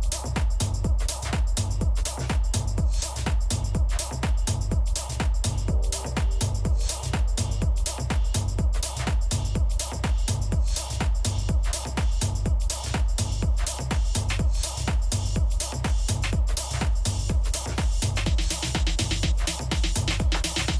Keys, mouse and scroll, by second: 0.4 Tab, 0.8-3.6 middle drag, 3.8 s, 8.6-11.8 middle drag, 10.9 KP_3, 11.8 z, 12.3 middle click.